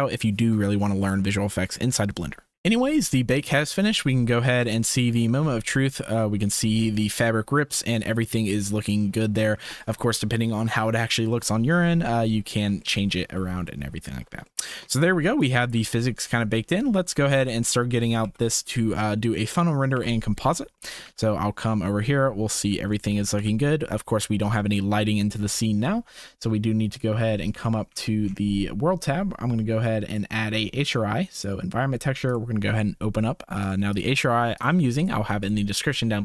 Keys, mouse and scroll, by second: 2.5 ctrl+s, 3.9-4.4 middle drag, 4.7-5.1 shift+middle drag, 5.5 space, 7.0-7.8 middle drag, 8.3-9.2 shift+middle drag, 9.5 space, 12.0-12.4 drag, 12.8-13.3 shift+drag, 13.6-14.1 drag, 14.5 shift+drag, 15.4 click, 15.8 space, 17.0 space, 17.5-17.8 shift+middle drag, 18.9 ctrl+s, 19.9 KP_0, 20.8 shift+middle click, 21.0 z, 23.2 click, 24.0 ctrl+s, 30.0-31.4 drag, 31.4 middle click, 32.2 click.